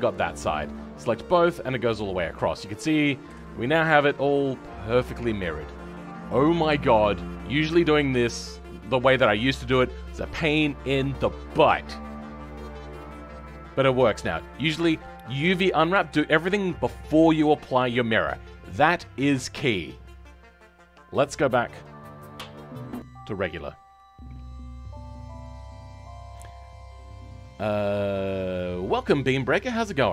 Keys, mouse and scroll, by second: 22.6 scroll down 3.